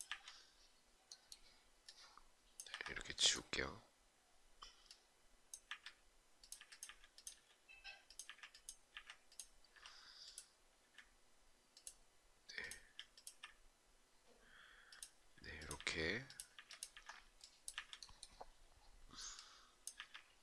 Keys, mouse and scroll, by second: 2.3 Delete, 5.3 Delete, 12.4 Delete, 14.7 Delete, 15.3 Delete, 19.5 Delete.